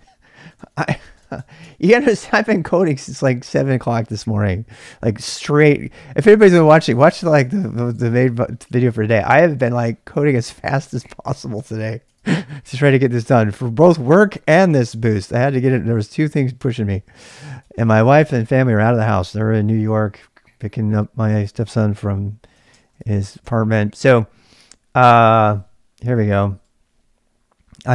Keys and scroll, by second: 0.0-1.7 typing, 0.5 ctrl+c, 12.0-13.2 typing, 17.1-18.0 typing, 22.5-23.9 typing, 25.8-26.5 typing.